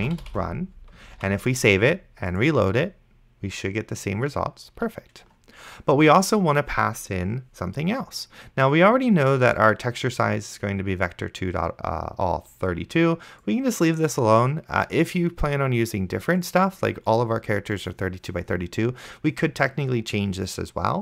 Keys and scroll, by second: 0.0-0.9 typing, 1.4 ctrl+s.